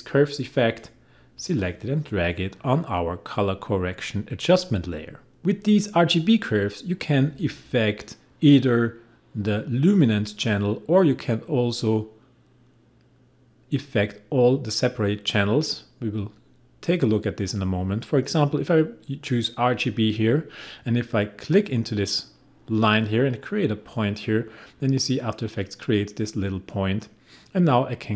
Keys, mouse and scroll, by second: 4.8 click, 11.5 click, 19.7 click, 23.9 click, 27.5-28.1 drag.